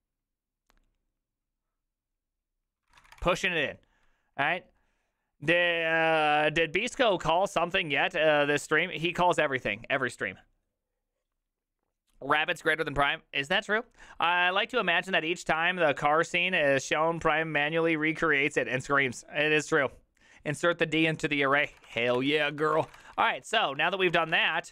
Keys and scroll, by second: 2.8-4.1 typing, 21.5-24.7 typing.